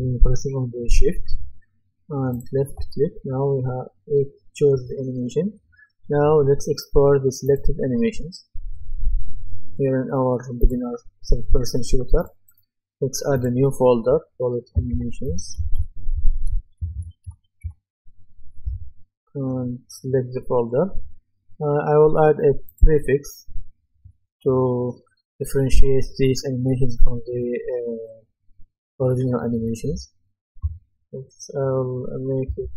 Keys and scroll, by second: 14.9-18.1 typing, 32.5 shift+s.